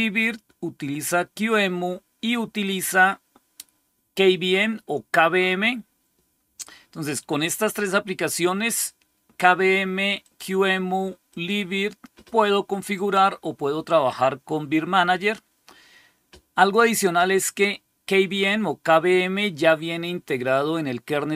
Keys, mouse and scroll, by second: 1.3 click, 2.5 click, 10.1 click, 11.2 click, 12.7 click, 16.5 click.